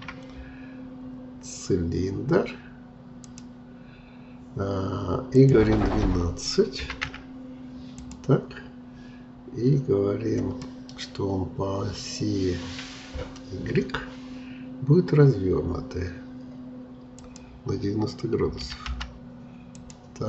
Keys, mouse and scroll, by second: 1.6 shift+a, 5.4-8.4 drag, 10.6-13.7 middle drag, 17.2-20.2 drag.